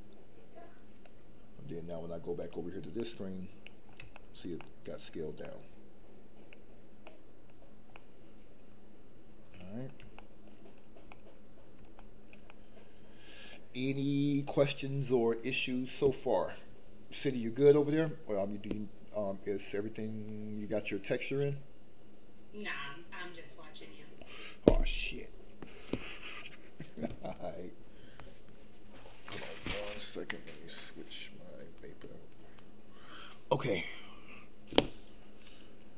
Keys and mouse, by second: 2.3 click, 2.9 middle click, 4.1 shift+middle click, 4.5 middle click, 5.4-6.5 middle drag, 7.0 middle click, 7.9-9.5 middle drag, 10.1 shift+middle click, 11.1 middle click, 11.9 shift+middle click, 12.5 middle click.